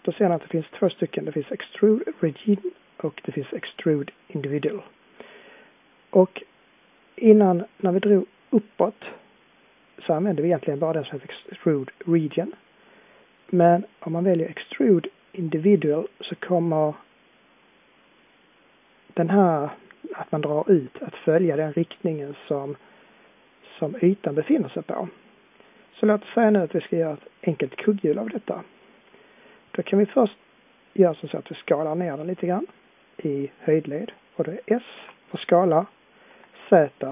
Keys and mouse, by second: 34.9 s.